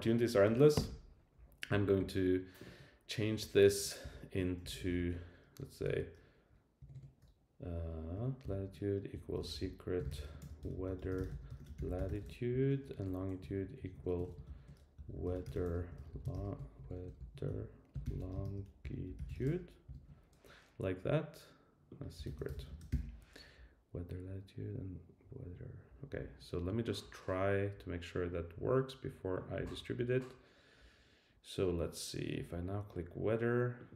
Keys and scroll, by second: 3.6 alt+Right, 4.0 alt+shift+Left, 12.9 Right, 13.4 Right.